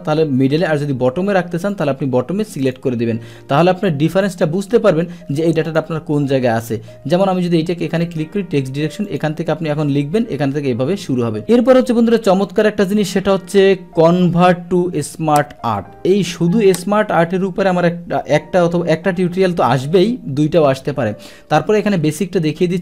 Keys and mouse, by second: 1.7 click, 2.6 click, 4.2 click, 5.7 click, 6.7 click, 8.0 click, 9.1 click, 12.4 click.